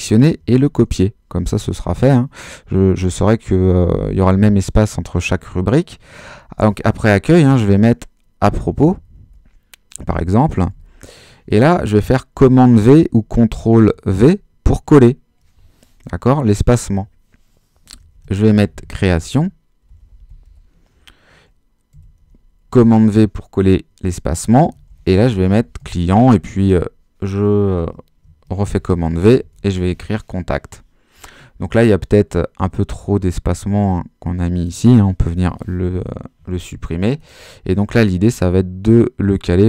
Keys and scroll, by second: 0.6 super+c, 7.4-11.2 typing, 14.1 super+v, 17.9-21.9 typing, 22.7 super+v, 24.4-26.3 typing, 26.4 super+s, 26.6 super+v, 28.2-30.4 typing, 35.2 BackSpace.